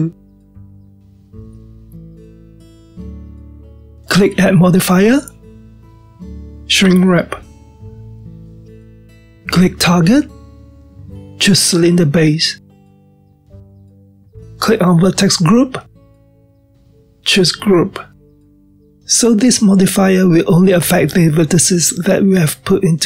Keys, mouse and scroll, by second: 5.1 click, 8.1 click, 12.0-15.0 drag, 15.5-18.6 drag, 20.2-23.0 middle drag.